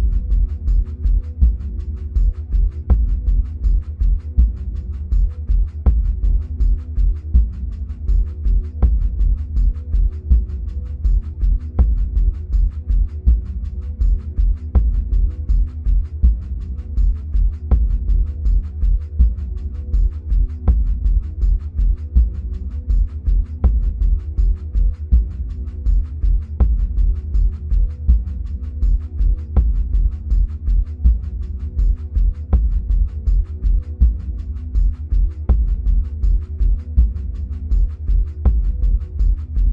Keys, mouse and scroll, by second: 6.9-8.1 scroll down 2, 8.1 ctrl+z, 9.0 scroll up 1, 10.0-11.9 scroll down 1, 16.6-17.5 scroll up 1, 27.3 ctrl+z, 29.0-39.7 drag.